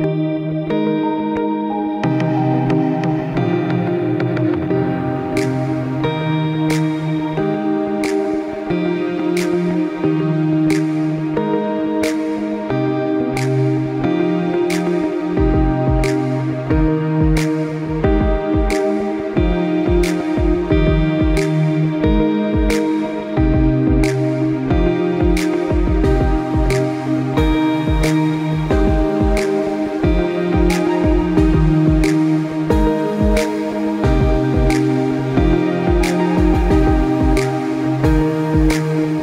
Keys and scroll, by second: 18.6 ctrl+z.